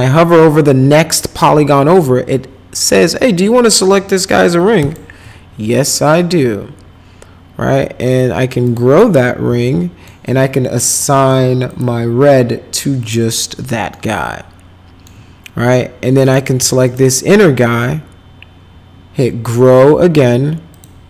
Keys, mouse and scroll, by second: 4.8 shift+click, 8.6 click, 9.6 alt+middle click, 10.7 middle click, 11.1 middle click, 11.7 click, 13.0 click, 13.9-15.0 alt+middle drag, 16.2 click, 16.8 shift+click, 20.7 click.